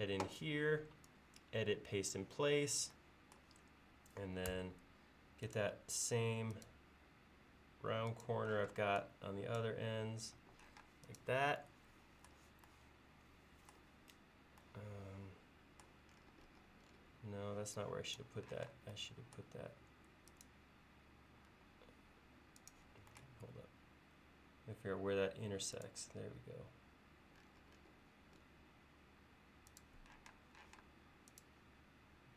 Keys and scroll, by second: 4.6 a, 8.6 p, 10.4 e, 10.9 space, 18.6 m, 21.6 l, 30.4 space, 30.8 m.